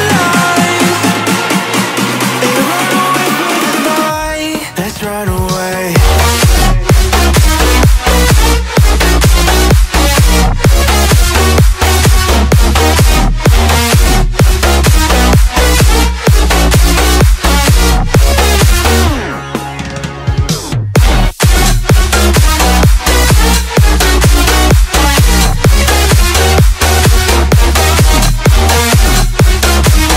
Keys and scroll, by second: 5.7 ctrl+z, 13.2 space, 15.1 space, 28.7 ctrl+j.